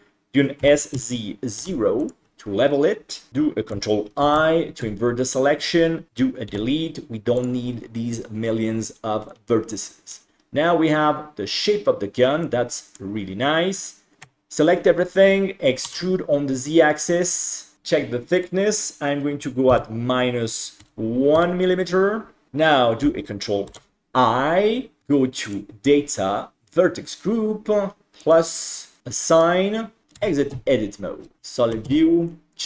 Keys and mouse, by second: 0.6 s, 3.3 ctrl+i, 6.5 Delete, 9.3 middle click, 12.4 middle click, 14.3 a, 17.5 e, 18.4-22.5 drag, 23.8 ctrl+i, 25.5 click, 28.4 click, 30.5 Tab, 31.4 alt+z, 31.8 alt+z, 32.3-32.6 middle drag.